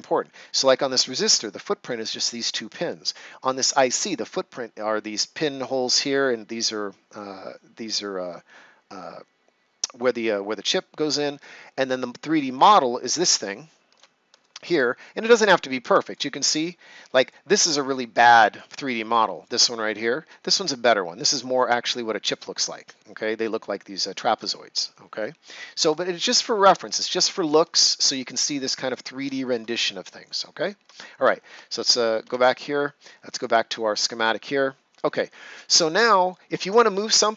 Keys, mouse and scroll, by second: 0.2 ctrl+scroll up 1, 3.4 right click, 13.1 right click, 14.4 shift+right click, 25.9 shift+right click, 27.0 ctrl+scroll down 1, 27.9 right click, 28.4 ctrl+scroll down 1, 28.8 right click, 29.3 ctrl+scroll down 1, 29.7 right click, 30.4 ctrl+scroll down 1, 32.1 2, 33.3 click.